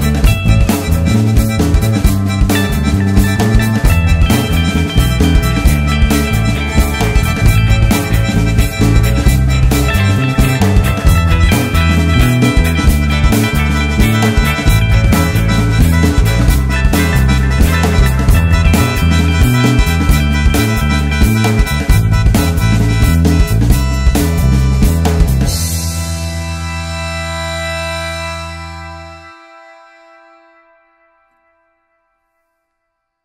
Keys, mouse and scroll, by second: 0.4-9.5 drag, 10.2 Tab, 11.1 Tab, 14.9 `, 15.6 `, 16.5 scroll up 1, 16.8 `, 20.5 `, 21.5-22.3 scroll down 1, 22.3 alt+click, 22.9 3, 23.1 alt+click, 23.7 `, 26.4 alt+a, 27.3-27.7 scroll up 1, 27.7 alt+click, 28.2 scroll down 1, 30.6 ctrl+z, 32.9-33.2 scroll down 1.